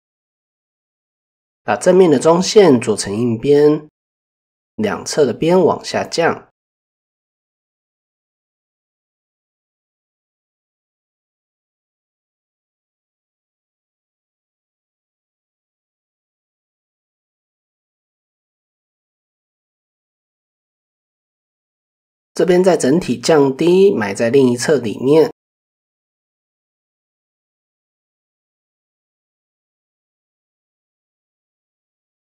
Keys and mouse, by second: 0.5 alt+click, 1.8 click, 5.6-7.4 drag, 7.7-8.3 middle drag, 8.6 middle click, 9.2 middle click, 10.4 click, 11.6-14.9 middle drag, 15.0 middle click, 15.9 shift+middle click, 16.4 middle click, 17.9 click, 19.4 shift+middle click, 19.7-20.2 middle drag, 20.5-20.8 middle drag, 21.7 click, 23.1 click, 24.8 click, 25.0 middle click, 25.9 middle click, 26.5 middle click, 27.1-29.0 drag, 29.1 middle click, 30.7 shift+click, 31.2 middle click, 31.9-32.2 drag.